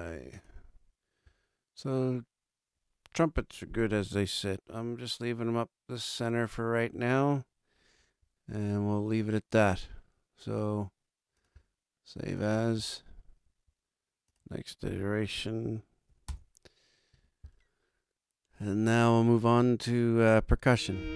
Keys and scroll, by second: 15.3 BackSpace, 16.1 7, 16.2 Return.